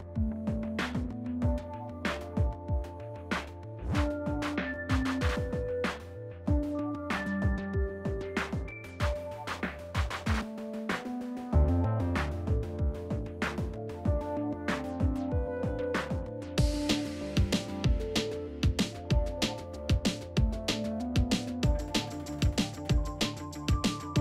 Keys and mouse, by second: 0.2 click, 1.5 middle click, 2.2 KP_3, 2.7 alt+z, 3.2 click, 6.0 ctrl+r, 7.0 middle click, 8.9 alt+z, 9.7 g, 12.2 ctrl+z, 12.3 ctrl+z, 14.4 g, 17.0 shift+click, 17.6 alt+z, 18.6 alt+z, 19.0 shift+click, 19.2 shift+click, 19.6 shift+click, 20.5 g, 22.3 s, 23.5 alt+z, 23.8 click, 24.0 alt+z.